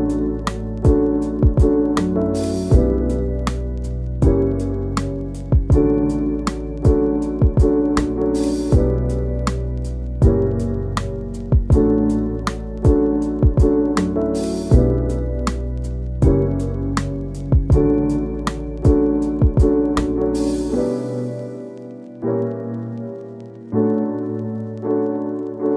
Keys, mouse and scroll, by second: 2.5-3.9 drag, 3.9 scroll down 3, 4.0 middle click, 5.5 click, 10.9 KP_Decimal, 11.3-14.3 middle drag, 14.3 scroll up 1, 14.4-16.1 shift+middle drag, 17.5 scroll down 1, 17.7 shift+middle drag, 17.8 scroll up 2, 18.0-19.2 middle drag, 19.2 scroll up 1, 19.4 scroll down 2, 19.6 click, 19.7 scroll up 1, 19.9 click, 20.5 scroll down 1, 20.8 scroll up 1, 21.1 click, 21.4 click, 21.7 click, 22.4 click, 22.7 scroll up 1, 22.8 shift+middle click, 23.8 scroll up 1, 24.0 f, 24.5-25.6 drag, 25.6 shift+middle click.